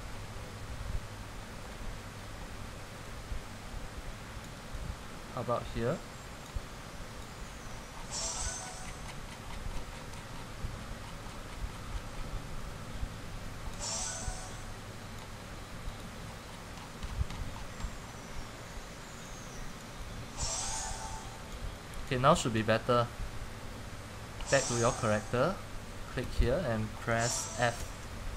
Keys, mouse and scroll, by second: 2.5-4.6 scroll down 89, 4.6 click, 7.3 click, 7.8-14.0 scroll down 178, 14.0 click, 16.1 click, 16.3-17.0 scroll, 17.1-20.1 scroll up 10, 20.1 scroll up 1, 20.2 click, 20.6 click, 26.5 click, 28.0 typing.